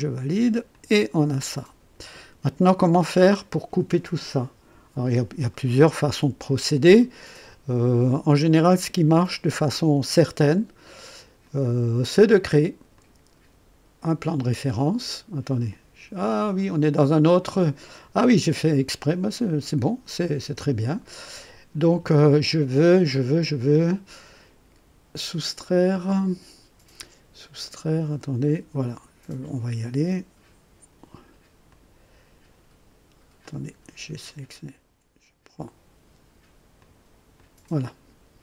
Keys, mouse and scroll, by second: 0.7-2.5 drag, 5.5-6.2 right drag, 6.5 scroll up 1, 7.0-7.5 right drag, 11.4 click, 12.9 click, 14.3 click, 15.6 click, 16.5 click, 31.7 click, 33.4 click, 36.8 click, 37.3 click.